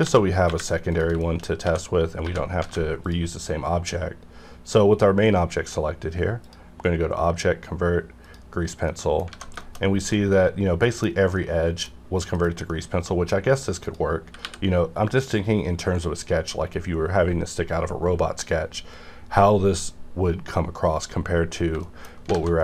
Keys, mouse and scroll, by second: 0.0 x, 0.5 y, 0.9 click, 1.2 middle click, 1.2 shift+middle click, 1.6 a, 2.2 1, 2.2 a, 3.0 click, 6.4 click, 8.9 middle click, 9.3 alt+a, 9.6 shift+middle click, 9.8 scroll up 1, 10.1 middle click, 11.1 scroll down 1, 11.3 middle click, 12.0 scroll up 1, 12.3 middle click, 12.4 scroll down 1, 12.7 middle click, 12.7 middle click, 13.3 scroll down 1, 13.8 click, 13.9 click, 14.2 r, 14.4 r, 20.9 right click, 21.4-22.0 scroll down 2, 21.8 shift+middle click, 22.3 alt+a.